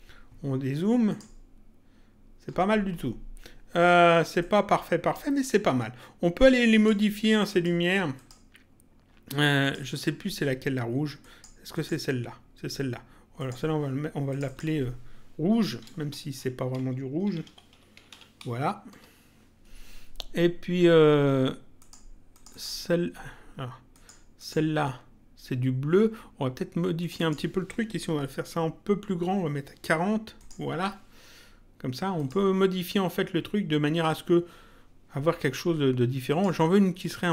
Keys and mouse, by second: 1.1 click, 4.4 click, 6.7 click, 9.6 click, 11.2 click, 13.3 click, 15.7 End, 16.1-18.1 typing, 18.9 Return, 21.8 click, 23.9 click, 26.9 click, 30.3 click, 32.1 click, 36.3 click.